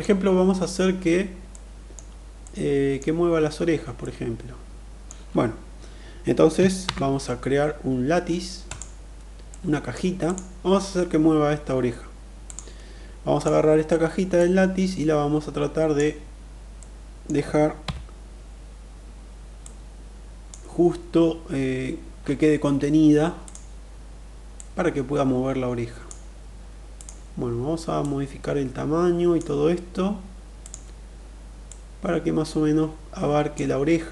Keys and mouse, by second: 1.1-1.5 middle drag, 2.0-2.6 middle drag, 3.7-4.7 middle drag, 6.4 shift+a, 8.9-9.5 middle drag, 13.0 click, 14.0-15.5 drag, 16.4-16.9 middle drag, 17.3 KP_1, 19.2-20.1 drag, 22.9 click, 24.2-25.7 drag, 27.5-29.0 drag, 30.1 click, 31.1-33.0 drag, 34.0 KP_3.